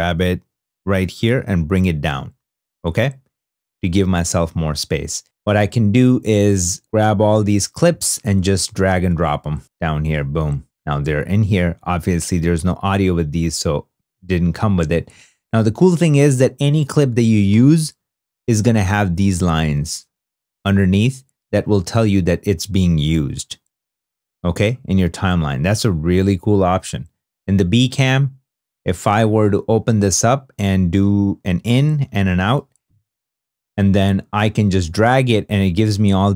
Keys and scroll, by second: 31.4 i, 32.4 o.